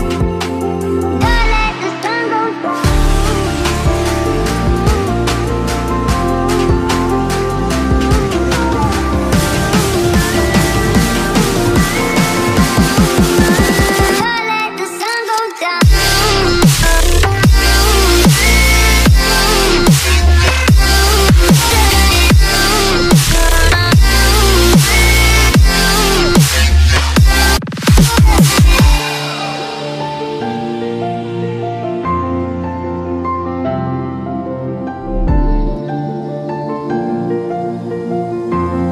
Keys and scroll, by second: 8.6 Left, 16.0 Left, 16.9 Right, 17.5 Left, 35.2 Right, 38.6 Right.